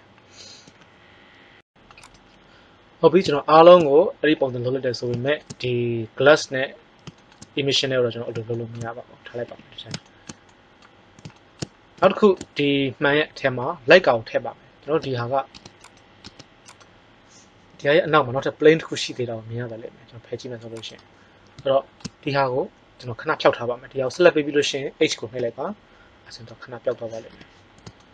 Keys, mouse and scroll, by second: 9.4 KP_1, 14.9 Tab, 15.5 Tab, 15.7 click, 16.2 Tab, 17.6 g, 25.3 h, 27.3 KP_1.